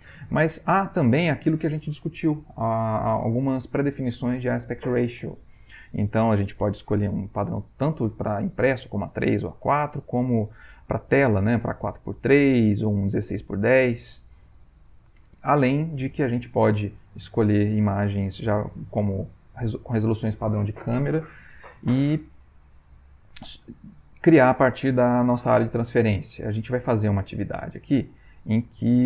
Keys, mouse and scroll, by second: 0.9 click, 9.9 click, 13.2 click, 14.0 click, 17.2 click, 18.8-20.2 drag, 23.9 click, 26.5 alt+Tab.